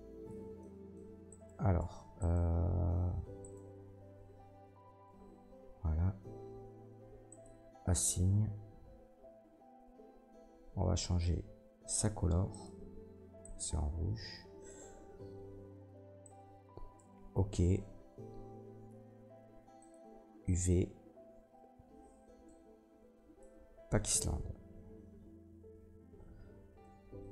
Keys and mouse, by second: 1.3 middle click, 1.8 Tab, 2.2 middle click, 3.4 middle click, 4.2 Tab, 4.6 a, 8.8-12.6 drag, 12.6-16.3 middle drag, 16.3-27.3 drag, 18.6 a.